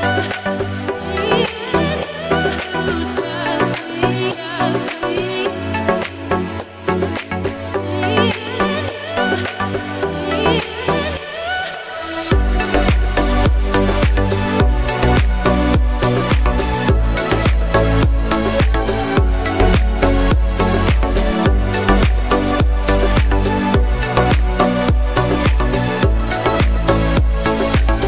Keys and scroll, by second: 0.7 a, 1.1 p, 2.0 y, 18.6 ctrl+t.